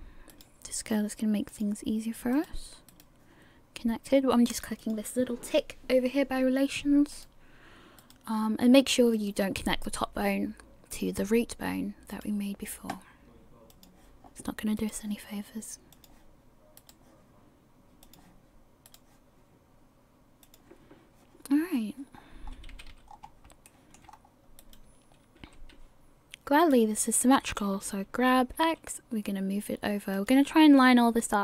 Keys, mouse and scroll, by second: 0.5 right click, 1.5 click, 2.5 right click, 3.0 right click, 4.8 click, 7.3 right click, 8.2 right click, 12.3 right click, 13.7 click, 15.0 right click, 15.9 click, 17.0 right click, 18.0 click, 19.1 right click, 20.4 click, 22.1-22.5 scroll up 1, 22.7 scroll up 2, 22.7 a, 23.1-23.7 scroll down 2, 23.7 shift+middle click, 24.1 scroll up 2, 24.8 right click, 25.4 g.